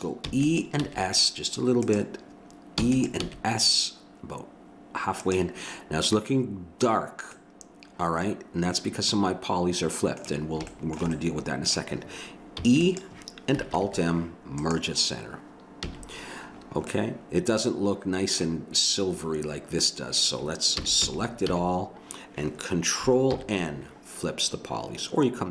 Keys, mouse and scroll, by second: 0.2 e, 0.7 s, 2.8 e, 3.1 s, 7.3-9.2 middle drag, 10.7 middle click, 12.5 e, 13.8 alt+m, 15.8 a, 20.8 a, 21.0 a, 21.5 a, 23.3 ctrl+n.